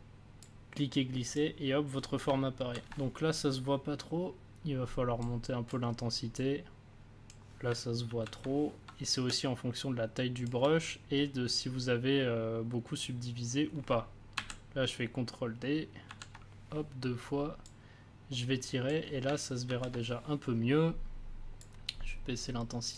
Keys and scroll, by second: 2.5 ctrl+z, 8.0 ctrl+z, 9.2 space, 14.3 ctrl+d, 16.0 ctrl+d, 19.6 ctrl+z.